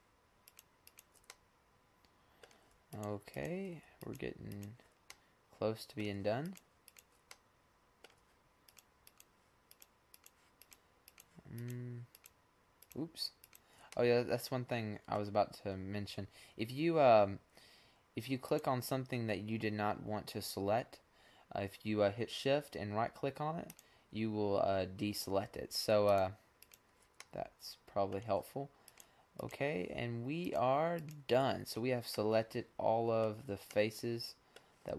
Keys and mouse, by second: 1.1 middle click, 1.5 middle click, 2.1 middle click, 2.7-5.0 middle drag, 5.3 middle click, 6.5 middle click, 7.6 middle click, 8.2 middle click, 8.7 middle click, 9.3 click, 14.0 middle click, 14.4-15.8 middle drag, 17.9-20.0 right drag, 22.5-24.8 middle drag, 25.0-26.8 middle drag, 27.7 middle click, 28.7 middle click, 31.4 middle click, 32.5-34.2 middle drag.